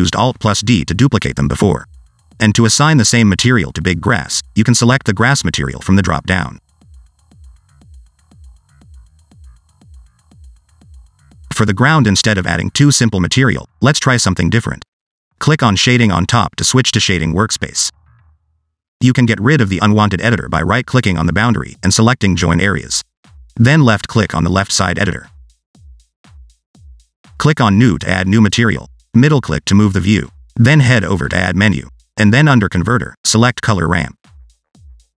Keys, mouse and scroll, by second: 1.0 click, 4.0 click, 8.2 click, 8.9 click, 11.5 click, 13.0 scroll up 2, 13.2-13.6 scroll down 1, 13.8 click.